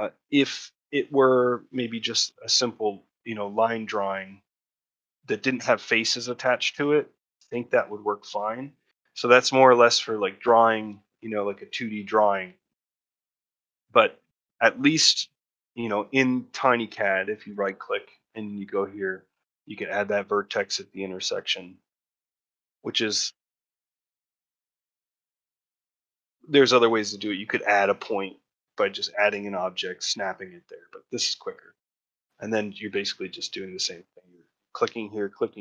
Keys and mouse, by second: 1.8 shift+middle click, 6.1 shift+middle click, 6.9 ctrl+middle click, 7.5 shift+middle click, 7.8 ctrl+middle click, 8.9 ctrl+middle click, 9.3 ctrl+middle click, 9.8 middle click, 10.6 ctrl+middle click, 10.9 shift+middle click, 12.5 ctrl+middle click, 13.0 shift+middle click, 13.2 middle click, 13.6 shift+middle click, 14.0 ctrl+middle click, 20.5 shift+middle click, 21.3 click, 21.9 ctrl+middle click, 23.4 1, 24.6 shift+middle click, 31.7 middle click, 32.0 shift+middle click, 33.3 shift+click, 33.7 shift+middle click.